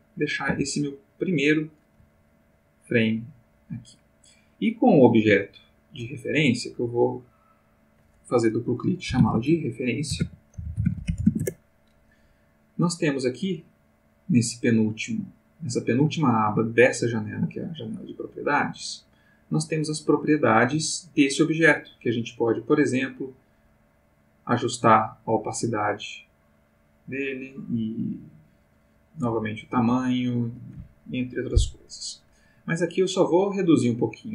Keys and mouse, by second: 0.1 click, 0.5 s, 1.8 click, 2.1 g, 2.8 click, 6.9 click, 9.2-11.3 typing, 11.4 Return, 18.5 click, 22.9 click, 23.5-27.6 drag, 28.1-30.1 drag, 29.8 Escape, 33.2-34.3 drag.